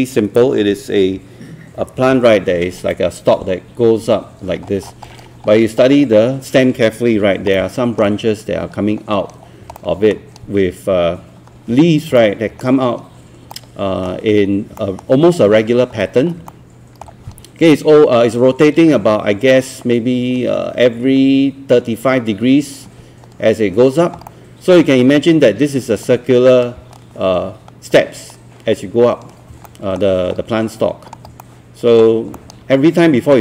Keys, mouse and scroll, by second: 4.7 scroll up 1, 5.5 scroll down 1, 7.6 alt+middle click, 9.5-9.8 scroll down 2, 9.8 alt+middle click, 12.2-13.3 alt+middle drag, 13.5 alt+middle click, 14.8 alt+middle click, 16.5 alt+middle click, 24.1 scroll down 1, 24.3 alt+middle click, 29.5 scroll down 1, 29.7 alt+middle click, 30.0-30.3 scroll up 1, 31.1 scroll down 1, 31.4 alt+middle click, 32.6 alt+middle click.